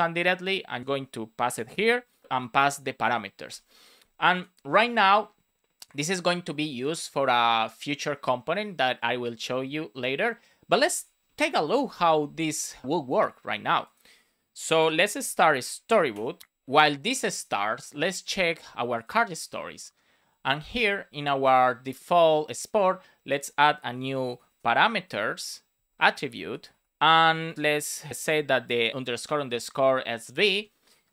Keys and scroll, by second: 0.8 super+v, 1.7 shift+9, 2.9 Return, 3.5 super+s, 14.9 space, 15.8 Return, 23.9 Return, 26.7 shift+;, 26.9 space, 27.1 shift+[, 27.4 Return, 27.5 shift+-, 28.9 shift+;, 30.5 space.